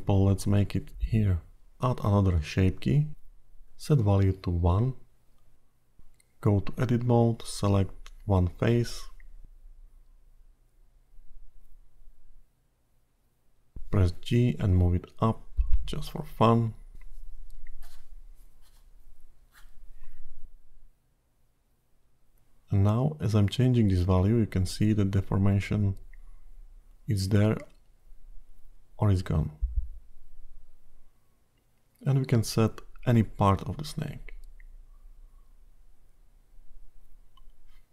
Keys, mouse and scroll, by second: 3.5 click, 5.0 click, 6.7 Tab, 7.5-8.1 scroll down 5, 8.5 middle click, 9.1 scroll down 2, 9.7-10.7 scroll up 7, 10.7-11.1 scroll up 2, 12.8 3, 13.1 click, 13.9 click, 15.6 g, 19.4-22.3 scroll down 1, 22.3 Tab, 22.3-24.3 scroll down 7, 24.3 click, 24.3 scroll down 1, 27.4-28.6 scroll up 6, 28.6 click, 32.5-32.9 scroll down 2, 32.9 middle click, 34.8 click.